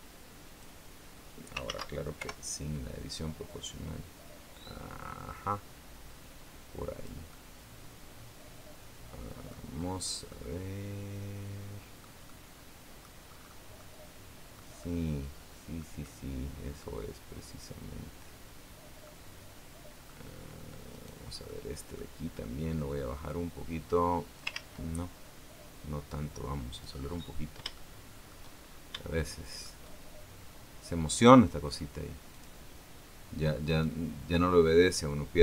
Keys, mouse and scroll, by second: 1.5 ctrl+z, 1.9 ctrl+o, 3.3-7.0 drag, 7.1-9.5 middle drag, 9.5-10.1 scroll down 2, 10.1-11.9 middle drag, 12.0 middle click, 13.0-13.5 scroll up 2, 13.5 middle click, 14.1-14.5 scroll up 1, 14.5-15.7 middle drag, 15.8 middle click, 18.8-20.0 middle drag, 20.7 right click, 21.2 middle click, 23.0-24.3 drag, 24.3 ctrl+z, 25.9 click, 26.9-27.4 scroll up 2, 27.5 shift+middle click, 28.3-28.7 shift+scroll up 2, 28.9 shift+middle click, 32.1 click, 33.5 right click, 34.6-35.4 drag.